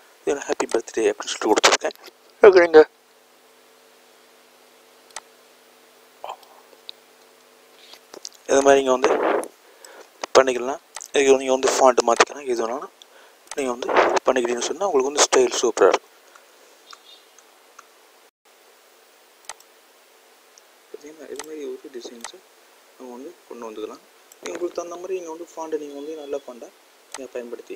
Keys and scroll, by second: 4.2 a.